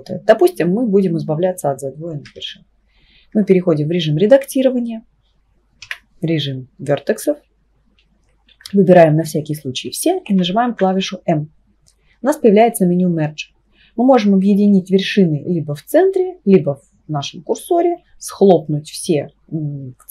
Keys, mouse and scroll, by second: 2.3 Tab, 3.3 Tab, 5.8 1, 8.5 a, 10.7 m.